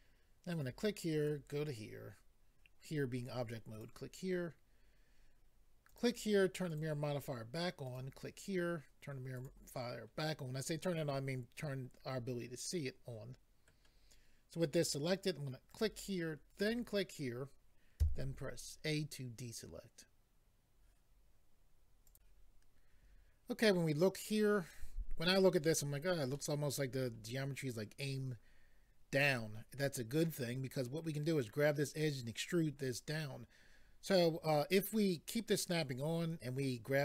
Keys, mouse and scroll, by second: 0.5 click, 1.2 click, 3.7 click, 5.8 click, 6.7 click, 7.8 click, 9.3 click, 11.6 middle click, 15.7 click, 16.6 click, 16.7 click, 18.0 a, 22.1 click, 24.7 middle click, 26.3 middle click.